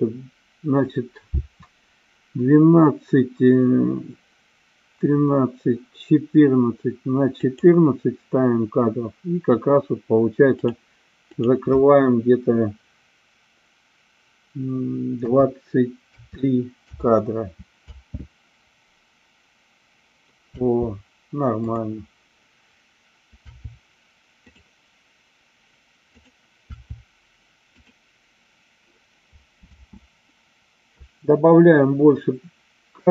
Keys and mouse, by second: 7.5 click, 10.5 click, 11.4-17.3 drag, 17.8 space, 21.7 click, 21.7 space, 26.2 click, 29.7 space.